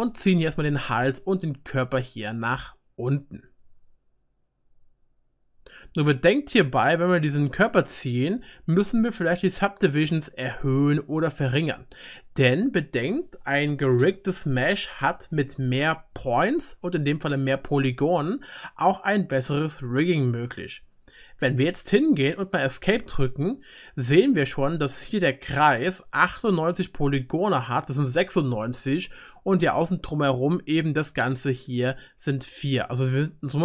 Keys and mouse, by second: 2.9-10.1 middle drag, 2.9-10.1 right drag, 14.1-28.9 drag, 14.1-33.6 middle drag, 14.1-28.9 right drag, 32.9-33.6 drag, 32.9-33.6 right drag.